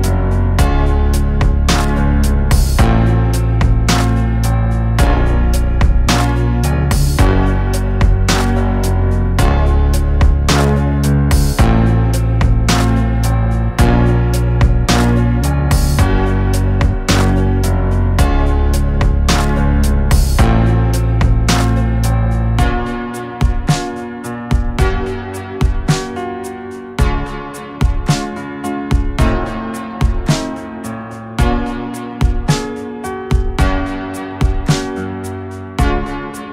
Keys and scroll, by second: 18.5 KP_1, 20.1 g, 20.9 z, 33.4 KP_1.